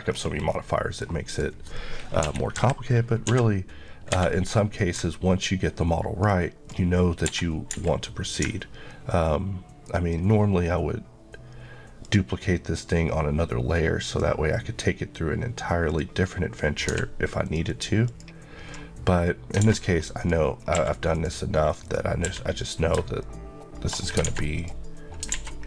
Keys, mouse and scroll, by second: 0.1-0.5 scroll down 1, 0.8 middle click, 1.3 click, 2.2 KP_3, 3.3 d, 4.2 Escape, 4.8 click, 7.3 Escape, 8.3 click, 17.5 ctrl+click, 19.7 alt+a, 20.2 click, 20.6 scroll up 1, 20.8 q, 21.4 click, 22.3 q, 22.6 click, 24.0 shift+scroll up 2, 24.3 alt+a, 24.6 click, 25.4 alt+a.